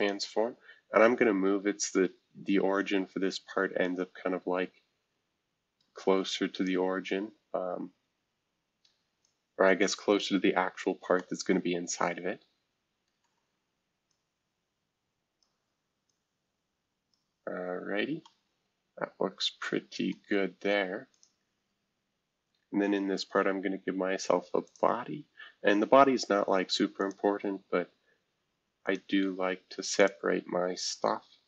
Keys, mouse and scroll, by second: 0.0 click, 0.8-1.6 scroll down 2, 1.6-2.3 scroll up 2, 2.3-3.8 scroll up 1, 3.8 scroll up 1, 7.2 scroll up 3, 8.1 scroll down 2, 8.4 scroll up 2, 9.2-10.2 drag, 10.6-11.2 scroll up 3, 13.2 middle click, 14.1-15.4 drag, 16.1-17.1 drag, 17.5-19.0 scroll up 1, 18.2-20.2 middle drag, 19.0-20.1 scroll up 1, 20.2-21.1 scroll down 2, 21.1-22.7 drag, 24.6-26.2 drag, 27.0-28.9 drag, 30.0 click.